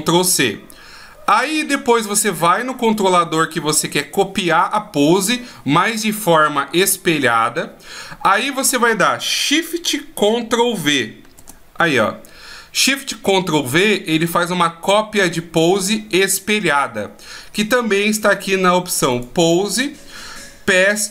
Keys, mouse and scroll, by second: 3.5 right click, 10.8 ctrl+shift+v, 18.9 click.